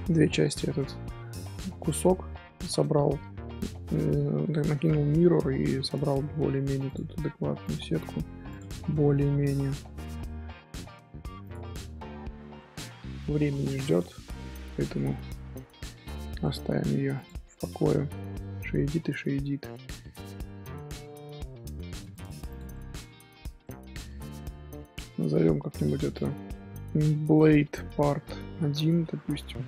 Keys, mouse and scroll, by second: 0.4 scroll down 1, 1.2-3.2 middle drag, 3.2 scroll up 2, 4.1 middle click, 5.0-6.8 shift+middle drag, 6.8 click, 7.6 shift+click, 8.5 click, 8.7 middle click, 9.4 g, 11.9-13.2 middle drag, 13.2 Tab, 13.6 shift+middle click, 14.4 Tab, 14.5-14.9 middle drag, 14.9 Tab, 16.4 middle click, 16.9 Tab, 17.1 click, 17.8 middle drag, 18.1 z, 18.5 scroll down 1, 18.5-18.8 middle drag, 18.8 z, 19.5 scroll down 1, 19.6-21.9 middle drag, 21.9 click, 22.7 middle drag, 22.9 Tab, 23.6-25.2 middle drag, 25.2 Tab, 25.9 click, 26.1-29.3 drag.